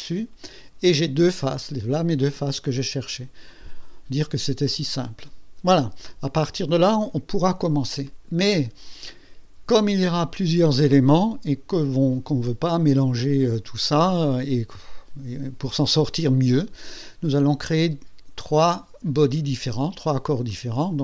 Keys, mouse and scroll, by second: 8.0 click, 20.5 click.